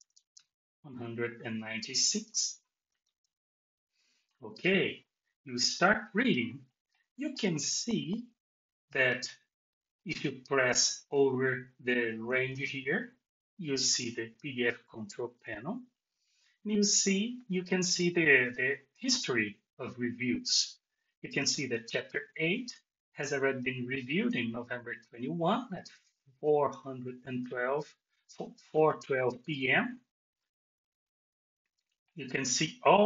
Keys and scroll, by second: 2.2 BackSpace.